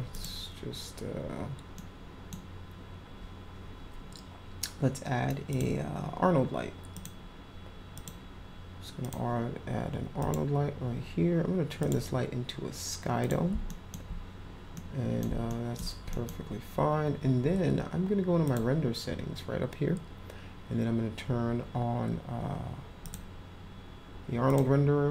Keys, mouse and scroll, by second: 0.1 click, 1.8 middle click, 5.5 click, 6.9 click, 8.0 click, 9.0 click, 10.2 click, 11.8 click, 13.2 click, 13.7 alt+middle click, 14.7 middle click, 15.4 alt+middle click, 16.1 middle click, 18.4 click, 23.0 click, 24.5 click.